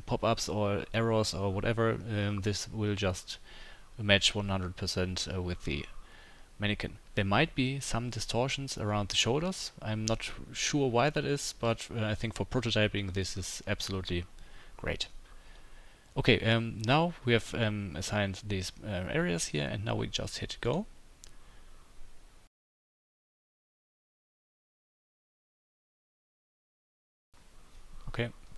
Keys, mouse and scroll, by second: 20.6-28.5 drag.